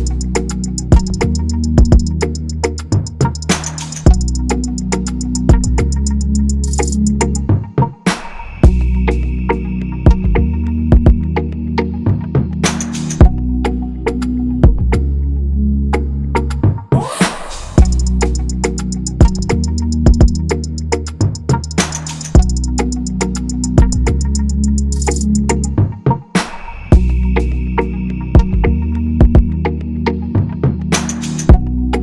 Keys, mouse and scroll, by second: 4.2 shift+click, 5.0 shift+click, 6.5 ctrl+[, 9.6 shift+i, 14.0 shift+Up, 15.0 shift+Up, 15.8 shift+Up, 17.6 double click, 18.7 typing, 21.1 double click, 25.1 double click, 28.3 double click, 29.5 i.